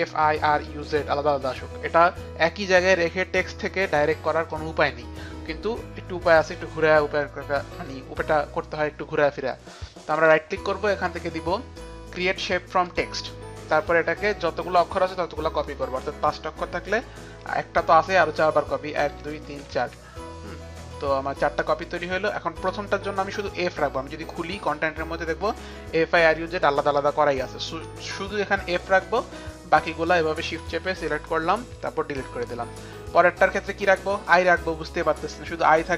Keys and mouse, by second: 0.0 click, 10.2 right click, 19.0 ctrl+d, 19.5 ctrl+d, 21.7 ctrl+d, 21.7 click, 23.1 ctrl+d, 23.1 click, 23.6 click, 24.7 click, 25.8 click, 25.8 click, 27.8 click, 28.5 click, 30.1 shift+click, 30.5 shift+click, 31.8 Delete, 31.8 shift+click, 33.2 shift+click, 34.3 click, 35.8 Delete, 35.8 click.